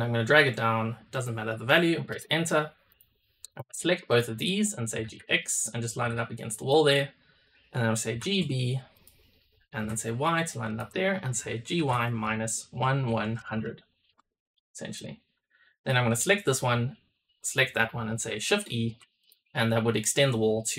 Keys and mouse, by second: 2.8 drag, 3.4 click, 4.0 shift+click, 4.8 g, 5.8 g, 8.0 g, 11.6 g, 14.9 click, 15.8-16.6 drag, 17.3 shift+drag, 18.4 shift+e, 19.1 click.